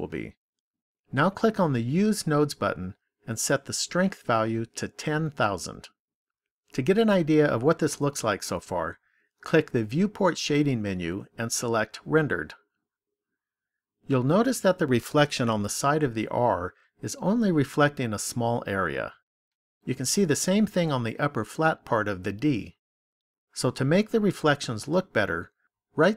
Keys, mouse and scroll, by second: 1.8 click, 3.3 click, 5.1 KP_0, 10.4 click, 25.9 right click.